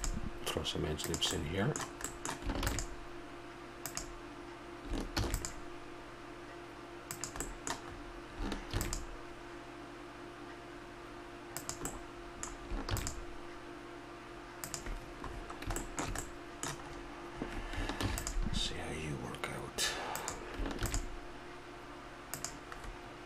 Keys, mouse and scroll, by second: 2.1-3.8 middle drag, 2.6 ctrl+r, 5.1 ctrl+r, 7.4 middle click, 8.7 ctrl+r, 9.5-11.6 middle drag, 11.6 click, 12.1 click, 12.8-14.5 middle drag, 12.9 ctrl+r, 15.8 middle click, 16.2 middle click, 16.4 middle click, 18.0 ctrl+r, 18.1-19.5 middle drag, 20.8 ctrl+r, 22.8 middle click.